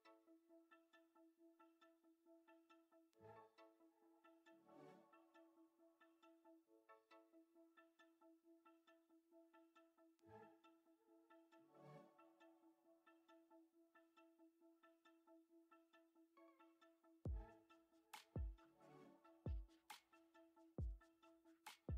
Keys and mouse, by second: 6.0 f, 6.5-11.7 drag, 12.8 shift+middle click, 13.4 click, 14.4 shift+middle click, 14.8-18.0 drag, 18.2-18.7 drag, 18.9 shift+middle click, 19.3-21.9 drag.